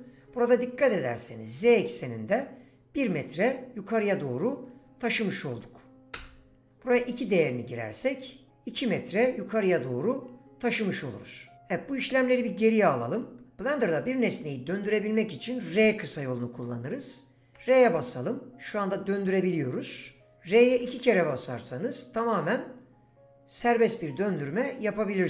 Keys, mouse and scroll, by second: 3.9-6.2 drag, 12.0 ctrl+z, 17.5 r, 20.6 r, 20.7 r.